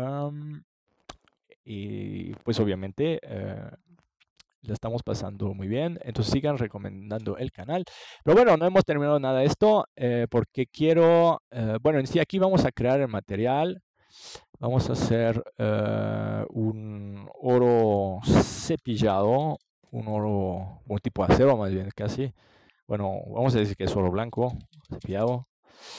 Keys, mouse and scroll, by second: 3.2 ctrl+s, 5.0-7.0 drag, 10.4 ctrl+s, 13.2-15.1 drag, 18.9-20.7 drag, 23.0-24.8 drag.